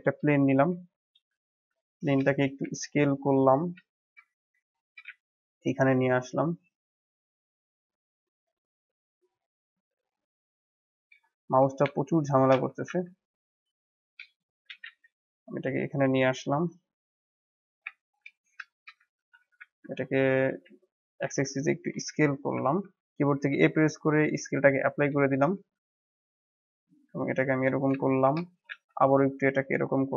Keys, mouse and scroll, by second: 0.3-0.8 shift+middle drag, 0.8 scroll down 3, 1.2 g, 1.9 scroll up 1, 2.2-2.5 shift+middle drag, 2.5 s, 3.5 scroll up 1, 3.8-5.0 shift+middle drag, 5.0 g, 10.9 scroll up 1, 11.2-11.7 shift+middle drag, 11.7 s, 12.6 g, 13.8 middle click, 14.4 scroll down 1, 14.6 g, 17.3-17.9 scroll up 4, 17.9-18.3 shift+middle drag, 18.3 scroll up 2, 18.6-19.1 shift+middle drag, 19.1 s, 21.7 KP_7, 22.3-22.6 scroll down 2, 22.6-23.2 shift+middle drag, 23.2 ctrl+a, 24.8-25.2 scroll up 1, 25.2-25.5 shift+middle drag, 25.5 s, 27.7 scroll up 1, 27.9 shift+middle click, 28.4 s.